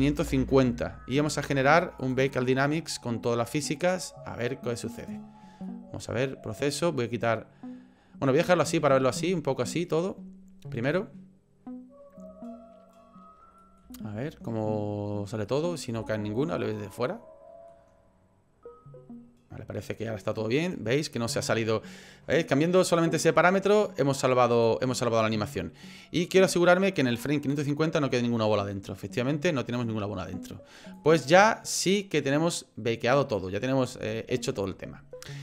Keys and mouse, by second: 0.0 KP_5, 2.0-4.0 drag, 5.0 click, 5.7-6.7 middle drag, 9.1 middle click, 13.6 middle click, 14.0 shift+middle click, 15.6 middle click, 16.6-17.8 middle drag, 24.5 click, 25.2-27.0 drag, 27.4-30.3 middle drag, 31.0-33.4 drag, 34.0 shift+middle click.